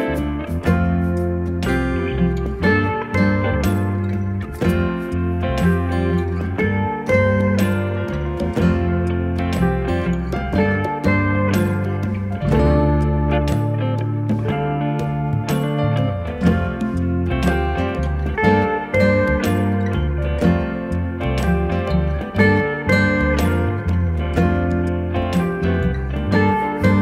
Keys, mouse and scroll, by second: 2.8 click, 5.1 click, 8.3 right click, 10.3 click, 19.4 ctrl+t, 20.6 right click, 21.7 click.